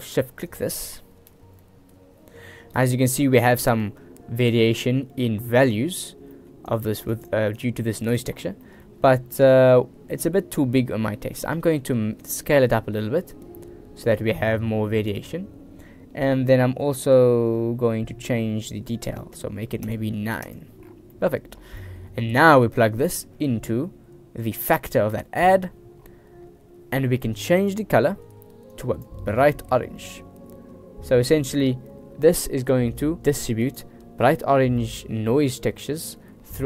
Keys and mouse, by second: 0.6 click, 6.5 click, 6.9 click, 7.8 click, 8.8 middle click, 11.8 middle click, 12.4-15.3 drag, 20.0 click, 21.3 middle click, 22.0 middle click, 23.1-25.6 drag, 27.8 click, 33.2 click.